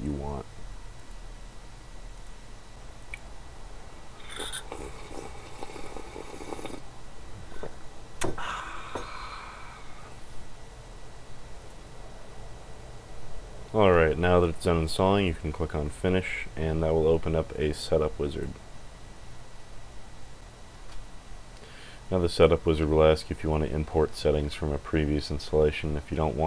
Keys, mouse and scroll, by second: 0.9 click, 2.1 click, 11.5 click, 18.2 click.